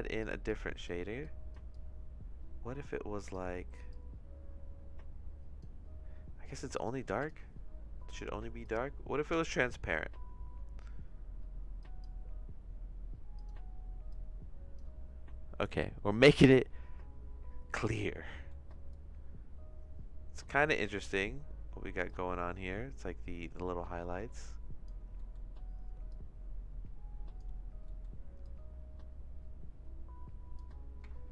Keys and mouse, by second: 6.9 click, 8.6 click, 9.3 shift+s, 13.4 click, 18.4 middle click, 19.0-22.0 drag, 22.0-24.9 drag, 25.3 middle click, 26.2-27.4 drag, 28.0 middle click, 28.5-30.5 drag, 31.2-31.3 shift+middle drag.